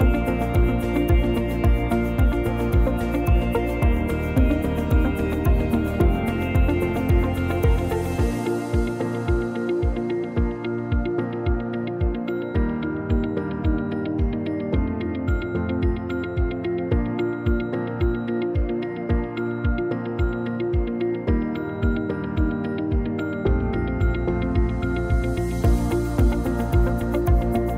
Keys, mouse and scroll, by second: 0.3-0.9 scroll up 1, 0.9 click, 2.0 click, 3.9 s, 5.8 Tab, 6.3 click, 7.0 shift+middle click, 7.4 s, 8.1 shift+d, 8.9 click, 12.4 shift+d, 13.2 click, 15.5 click, 16.1 click, 17.0 scroll up 2, 17.3 shift+middle click, 20.7 shift+d, 21.6 click, 23.3 scroll down 2, 23.6 click, 23.9 click, 25.1-25.4 scroll up 1, 26.3 s.